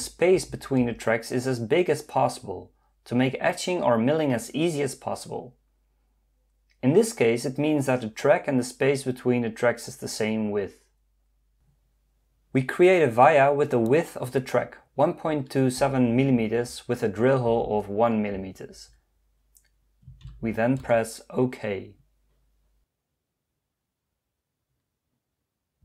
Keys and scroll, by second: 0.0-0.5 typing, 0.8 Return, 15.3 1.